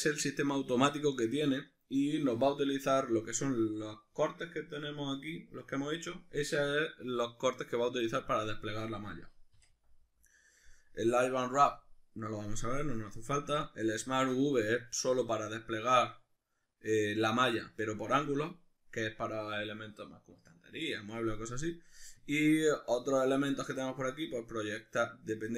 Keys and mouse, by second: 9.5 u.